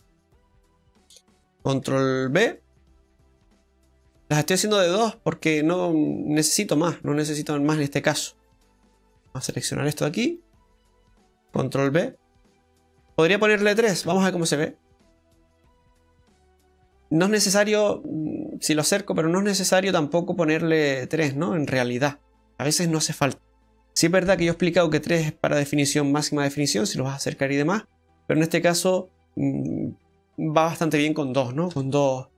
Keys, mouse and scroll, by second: 0.8 middle click, 2.4 ctrl+b, 8.8 click, 9.7 right click, 10.1 alt+shift+right click, 11.9 ctrl+b, 14.0 Tab, 14.2-14.7 scroll down 3, 15.6 click, 16.0 middle click, 17.7-18.1 scroll up 3, 18.5 scroll up 2, 18.8-19.5 scroll down 3, 19.9 middle click, 19.9 scroll down 2, 20.0 middle click, 21.8 scroll down 1, 22.3 middle click, 22.8 scroll up 2, 25.2 scroll up 1, 26.9-27.7 scroll up 2, 27.7-28.3 scroll down 2, 28.3 middle click, 30.8-31.5 scroll down 1, 31.7 Tab.